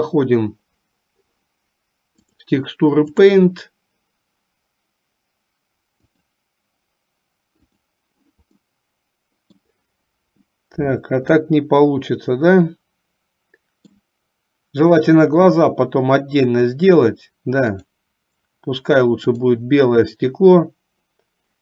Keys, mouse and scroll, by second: 2.3-3.5 drag, 6.2 click, 9.0 middle click, 11.7-14.2 middle drag, 18.0 click, 19.5 click.